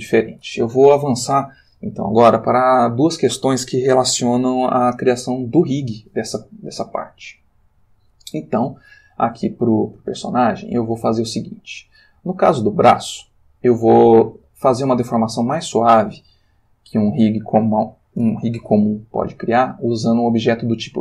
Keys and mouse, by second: 11.7-12.2 drag.